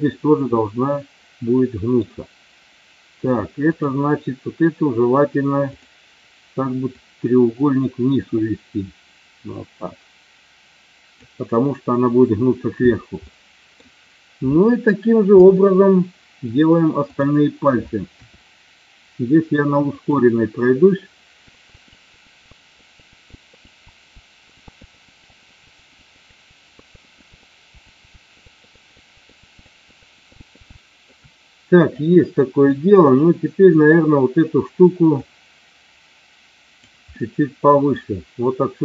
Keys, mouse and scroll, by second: 0.5-1.9 middle drag, 5.6 click, 6.9-11.1 drag, 13.3 middle click, 15.3 KP_7, 17.0 click, 18.1 e, 19.9 click, 21.0 middle click, 22.3 click, 22.6 right click, 23.1 click, 23.3 middle click, 23.6 click, 23.8 KP_7, 24.1 e, 24.5 click, 24.7 middle click, 25.1 click, 25.3 right click, 25.8 click, 26.0 click, 26.3 click, 26.5 click, 26.9 middle click, 27.3 KP_7, 27.9 click, 27.9 g, 28.1 e, 28.5 middle click, 28.7 click, 29.1 right click, 29.4 click, 29.8 right click, 30.2 click, 30.4 middle click, 30.8 shift+middle click, 31.9 click, 35.1-36.7 drag, 37.1 middle click.